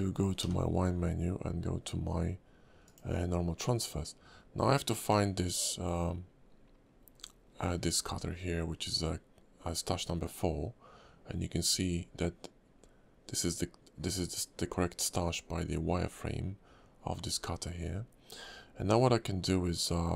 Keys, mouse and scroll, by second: 0.4 y.